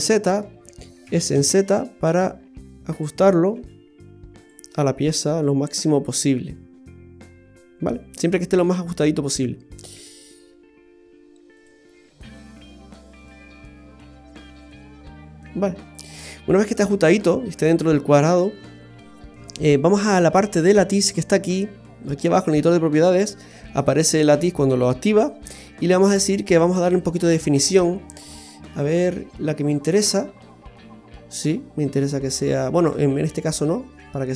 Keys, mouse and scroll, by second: 1.0 s, 3.5 g, 4.7 middle click, 9.9 s, 11.9 middle click, 14.2 s, 16.3 middle click, 18.4-19.6 scroll up 1, 26.1 click, 26.6 click, 28.1 click, 30.2-31.5 scroll up 2, 30.5 middle click, 34.2 click.